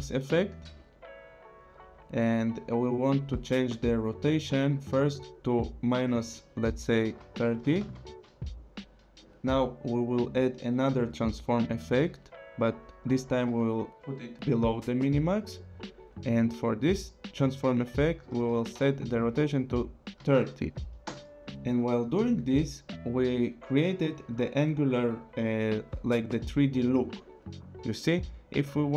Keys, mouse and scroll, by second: 4.7 click, 7.3 -, 7.6 KP_0, 7.8 Return, 10.6 click, 19.0 click, 20.2 KP_3, 20.5 KP_0, 21.0 Return.